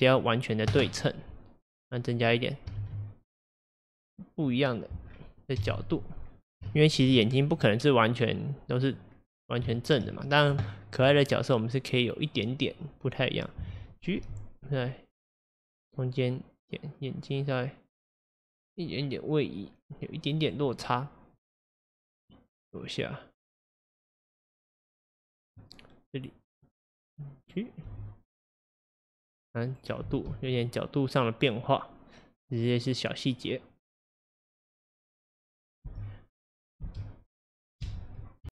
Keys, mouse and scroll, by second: 1.8-2.8 drag, 2.8 shift+d, 5.1-5.6 scroll down 1, 5.6 KP_1, 6.3-6.7 scroll up 1, 6.7-7.2 shift+middle drag, 7.2-8.4 scroll up 2, 8.4-12.4 drag, 9.2-9.7 scroll down 2, 9.7 shift+middle click, 10.0-10.7 shift+scroll, 10.7 shift+middle click, 11.5-12.4 scroll up 1, 14.3 g, 21.5-24.9 drag, 27.4 click, 27.9 g, 30.1 space, 35.9 space, 36.9 space, 37.9 space.